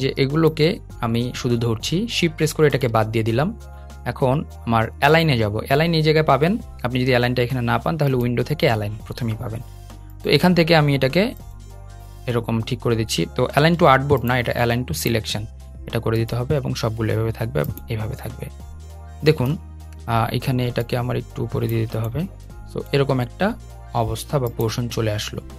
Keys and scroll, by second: 13.2 super+z.